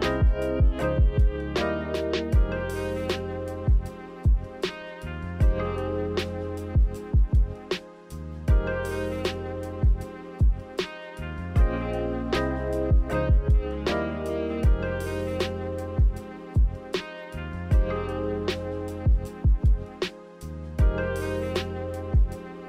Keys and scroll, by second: 0.0 x, 11.2 Delete, 12.9 ctrl+z, 14.7 Delete, 20.6 v, 21.5 Delete.